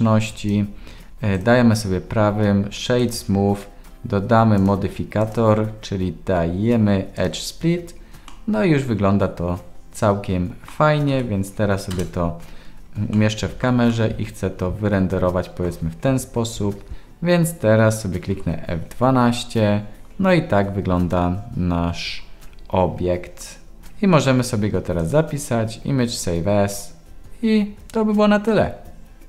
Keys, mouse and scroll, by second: 1.4-3.0 right drag, 4.5 click, 5.3-7.2 drag, 8.2-10.6 middle drag, 11.1 ctrl+s, 11.9 KP_0, 13.1 shift+click, 13.2-13.6 shift+middle drag, 13.9-15.6 middle drag, 16.9 ctrl+s, 16.9 KP_0, 18.7 F12.